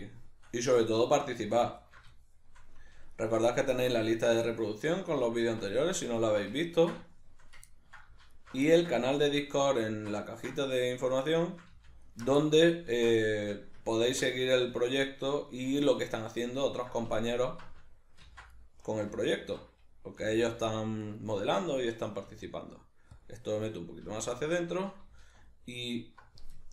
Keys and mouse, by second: 1.0 alt+shift+right click, 1.8 alt+shift+right click, 2.2-3.2 shift+middle drag, 3.2 alt+shift+right click, 4.0 alt+shift+right click, 4.5 shift+middle click, 5.4 alt+shift+right click, 6.2 alt+shift+right click, 6.6-8.4 ctrl+middle drag, 8.4 alt+shift+right click, 8.7-9.8 ctrl+middle drag, 9.8 alt+shift+right click, 10.3-12.0 ctrl+middle drag, 12.0 alt+shift+right click, 12.4-17.3 ctrl+middle drag, 14.0 ctrl+x, 17.3 alt+right click, 18.2 ctrl+x, 18.6 middle click, 19.3 alt+right click, 20.2 g, 21.2 right click, 22.3 s, 23.2 click, 24.0 z, 24.6 middle click, 25.3 alt+right click.